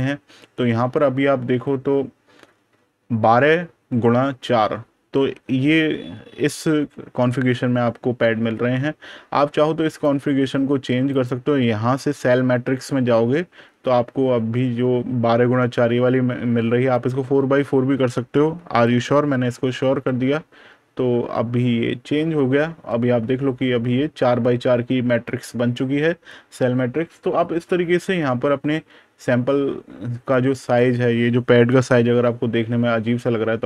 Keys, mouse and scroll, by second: 9.7 click, 16.8 click, 22.6 super+KP_Add, 23.8 super+KP_Subtract, 30.2 click, 31.8 super+KP_Add.